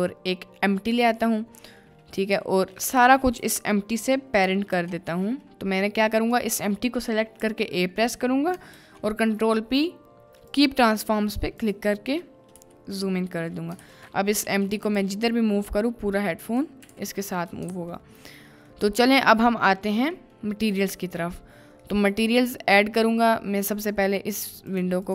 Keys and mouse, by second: 2.3 h, 3.0 ctrl+z, 3.4 a, 4.7 ctrl+p, 6.3 click, 7.4 a, 8.7 ctrl+p, 12.5 KP_Decimal, 13.0 middle drag, 13.6 middle click, 14.0 ctrl+s, 14.4 g, 14.9 e, 15.6 z, 16.4 click, 17.0 z, 17.0 r, 17.8 ctrl+s, 18.7-19.1 middle drag, 19.5 middle click, 20.2 middle click, 21.2 middle click, 21.9 middle click, 23.8-25.1 drag.